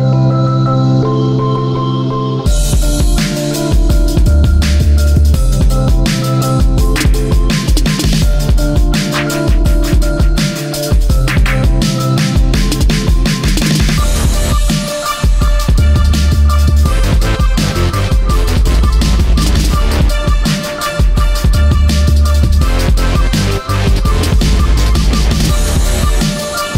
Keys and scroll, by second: 3.3 space, 10.2 space, 11.4 ctrl+z, 14.4 space, 19.4 space, 24.0 space, 25.7 ctrl+z.